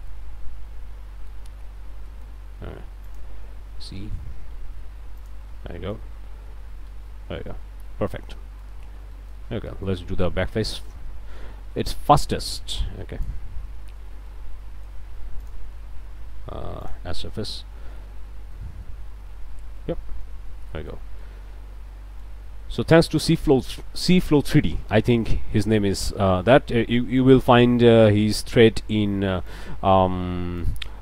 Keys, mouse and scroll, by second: 0.0-1.5 alt+drag, 1.5 Tab, 1.7 scroll up 1, 2.1 click, 2.5 a, 3.1 alt+click, 3.6 alt+e, 5.2 click, 5.6 scroll up 1, 5.7 click, 6.3 Tab, 6.5 scroll down 1, 6.9 alt+a, 7.1 alt+click, 8.0 click, 8.9 Tab, 9.5 scroll up 2, 10.2 a, 11.7 d, 12.0-13.4 drag, 13.8 a, 14.3 click, 15.4 alt+click, 16.3 q, 16.8 click, 17.3-18.8 drag, 19.0 Tab, 19.8 click, 20.4 Tab, 20.7 click, 21.2-22.4 middle drag, 22.4 scroll down 1, 22.8 middle click, 23.8 scroll up 1, 24.9-26.7 drag, 26.7-27.7 middle drag, 27.9-28.3 scroll up 1, 28.4 click, 29.5-30.8 drag, 30.9 ctrl+click.